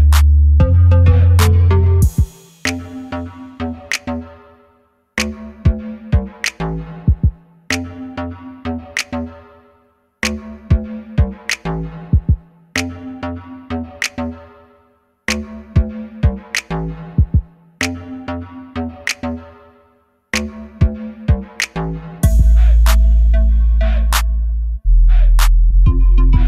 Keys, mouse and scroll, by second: 0.6 middle click, 1.6 KP_7, 2.9 shift+a, 4.5 s, 9.4-10.8 drag, 11.4 r, 12.9 click, 13.0-14.2 middle drag, 16.0-18.1 drag, 18.4-20.6 drag, 21.9-23.3 drag, 23.3 KP_0, 25.5-26.4 drag.